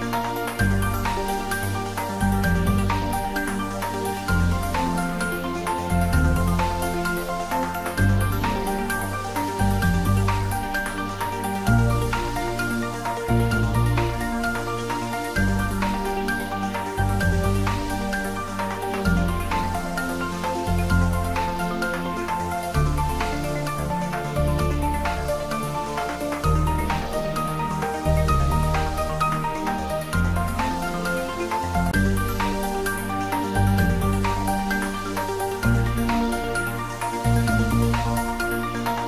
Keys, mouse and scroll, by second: 0.8 click, 2.8-4.4 middle drag, 4.7 3, 5.5 scroll down 1, 7.2 ctrl+r, 8.0 click, 10.9 click, 11.9 Tab, 13.6 right click, 14.3 click, 15.0-15.5 scroll down 1, 15.5-18.1 middle drag, 18.1 scroll down 1, 19.1 click, 19.7-20.7 scroll down 1, 20.7-22.5 middle drag, 22.5 Tab, 24.2 ctrl+3, 25.3 Tab, 26.1 click, 27.0 Tab, 28.1 ctrl+r, 28.9 click, 32.0 click, 32.3-33.1 scroll up 1, 33.6 3, 34.4 scroll down 1, 36.1 middle click, 36.7 click, 37.6 click, 37.9 Tab, 38.7 click.